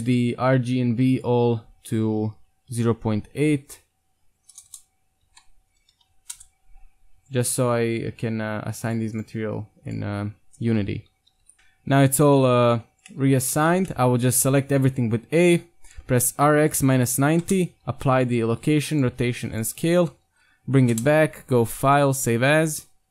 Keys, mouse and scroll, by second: 4.7 BackSpace, 7.2-11.5 right drag, 8.9-11.5 drag, 11.5 Tab, 13.5 a, 13.7-15.0 middle drag, 13.7 a, 15.5 middle drag, 16.3 r, 17.8 ctrl+a, 18.6 ctrl+a, 19.2 ctrl+a, 20.0 r, 21.9-23.1 drag.